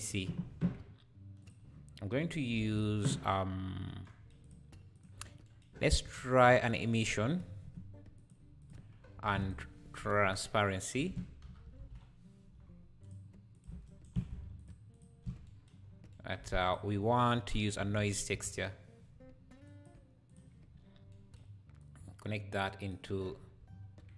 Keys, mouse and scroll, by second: 0.1 /, 1.4 click, 2.6 shift+a, 4.4 click, 5.2 x, 5.7 scroll up 4, 6.0 shift+a, 9.0 scroll up 2, 9.2 shift+a, 13.9-15.0 ctrl+shift+right drag, 14.6 ctrl+shift+click, 15.8-16.2 scroll up 3, 16.4 shift+a, 21.8-22.9 drag, 23.3 scroll up 2.